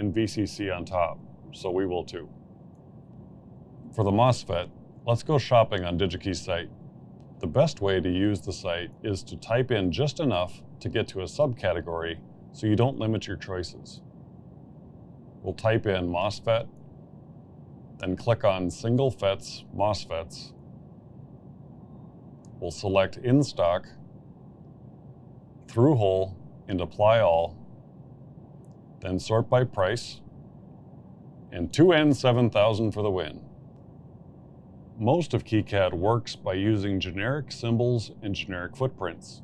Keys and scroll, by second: 1.2 g, 1.5 n, 1.8 d, 2.0 Return, 16.3-17.1 typing, 18.1 Return.